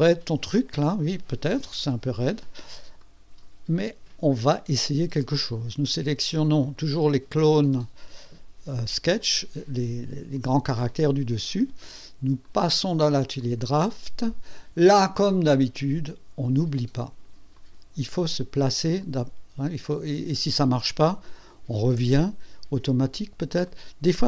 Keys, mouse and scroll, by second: 1.8 KP_3, 3.0 right click, 3.7 scroll up 1, 6.7 click, 9.2 ctrl+click, 12.4 click, 13.4 click, 17.5 click, 18.0 click, 19.0 click, 19.5 click, 21.5 click, 22.9 click, 23.6 click.